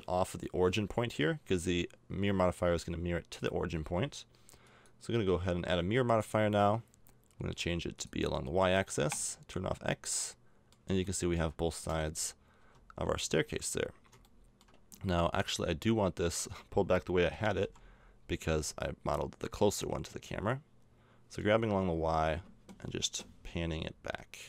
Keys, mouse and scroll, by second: 4.6-9.9 drag, 9.9 middle click, 10.2 click, 10.2-11.6 middle drag, 10.4 click, 11.9 KP_0, 12.6 z, 14.3 click, 17.3 g.